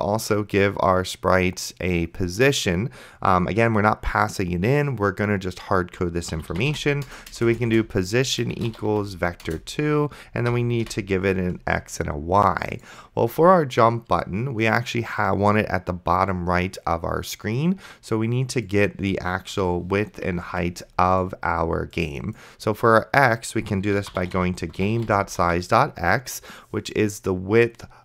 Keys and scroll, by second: 6.3-7.4 typing, 8.5-9.4 typing, 9.5 Return, 10.5 End, 10.8 ;, 19.9 ,, 20.7 ctrl+s, 23.6-25.9 typing.